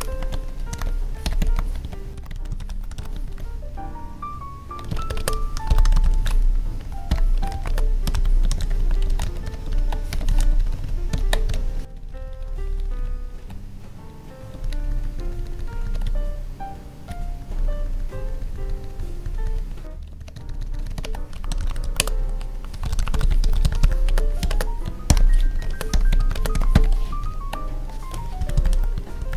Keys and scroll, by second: 4.9 Left, 4.9 space, 5.1 Left, 7.3 space, 7.6 space, 8.7 Tab, 9.0 ctrl+s, 9.2 Right, 9.7 ctrl+Left, 10.2 ctrl+s, 10.5 ctrl+Right, 11.4 Left, 11.8 ctrl+Up, 14.6 ctrl+Down, 16.0 Up, 19.8 Tab, 20.1 ctrl+Down, 21.9 space, 24.0 space, 24.4 space, 25.5 Right, 25.6 space, 26.3 space, 27.2 ctrl+Down.